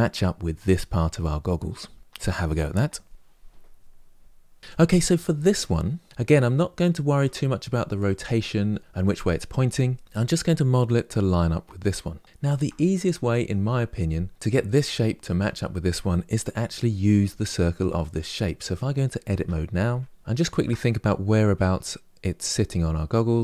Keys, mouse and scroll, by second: 4.4 click, 4.6 Delete, 4.6-6.0 middle drag, 6.0 click, 6.3-7.2 shift+middle drag, 7.2-8.8 scroll up 3, 12.2 shift+middle click, 12.6-14.3 scroll up 2, 14.3 click, 15.1 click, 19.0 Tab, 20.2-22.8 shift+middle drag, 23.2 middle click.